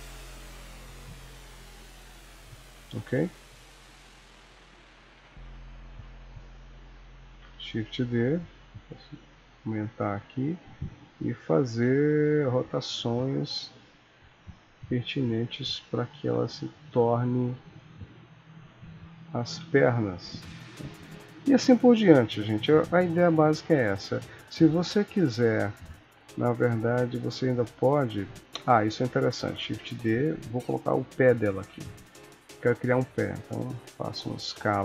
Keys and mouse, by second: 1.2 shift+click, 1.8 middle click, 4.5 click, 5.1 KP_1, 6.2 shift+click, 6.5 shift+click, 6.7 shift+click, 7.4 shift+d, 8.6 s, 10.6 click, 11.0 e, 11.8 r, 13.0 click, 13.2 r, 14.9 click, 15.6 g, 17.8 shift+click, 18.1 shift+click, 18.4 shift+click, 19.4 shift+d, 21.2 click, 21.6 click, 22.2 r, 23.2 click, 23.6 r, 27.5 shift+middle click, 28.3 click, 29.7 shift+d, 31.7 KP_3, 33.2 click.